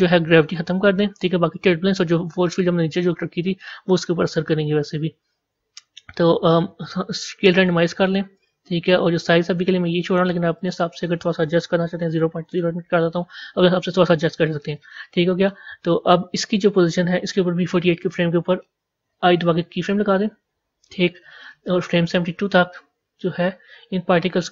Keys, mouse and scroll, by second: 0.9-2.1 drag, 2.1 scroll down 1, 3.1 scroll up 4, 7.6-19.7 drag, 19.7 i, 22.6-24.5 drag.